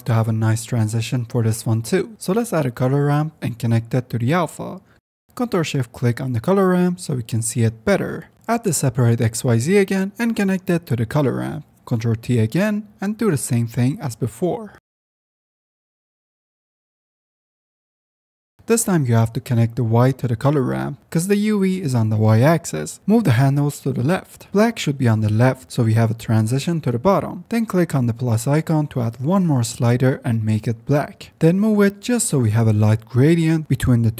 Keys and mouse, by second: 3.2 F10, 3.5 click, 4.8 click, 6.0 click, 7.0 ctrl+shift+click, 8.1 click, 8.7 shift+a, 11.2 click, 12.0 click, 12.7 click, 13.1 ctrl+t, 13.5 click, 14.7-15.2 drag, 15.4 click, 15.6 x, 15.8 click, 17.0 click, 17.2 drag, 17.7 click, 18.5 click, 20.5-22.0 drag, 23.0 click, 23.5-24.2 drag, 24.5 click, 25.4-25.9 drag, 26.1 click, 29.5-30.1 drag, 33.1 click, 33.8 click.